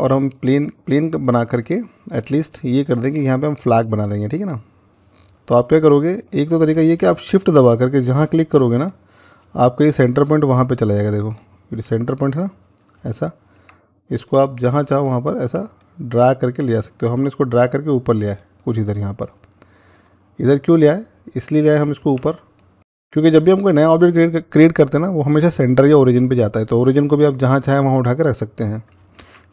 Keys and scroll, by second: 21.9 ctrl+z, 29.1 a.